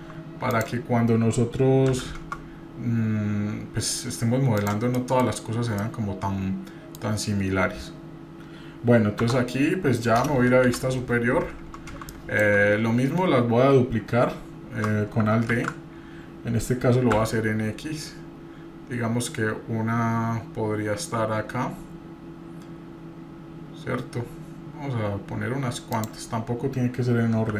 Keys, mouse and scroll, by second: 0.5 click, 1.9 s, 5.0 middle click, 5.7-7.0 middle drag, 5.7 scroll down 1, 9.2 Tab, 10.6 KP_7, 12.1-12.5 shift+middle drag, 12.9 scroll up 1, 14.8 middle click, 15.2 scroll up 1, 15.7 alt+d.